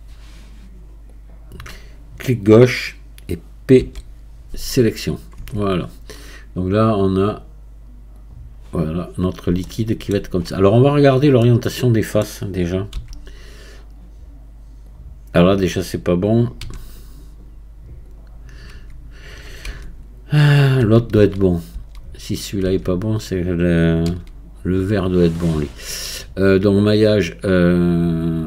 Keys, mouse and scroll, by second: 5.4 Tab, 9.2-9.7 scroll down 2, 9.7-13.0 shift+middle drag, 13.0 q, 16.6 q, 19.7 Tab, 20.8 a, 24.1 a, 26.8-28.4 drag.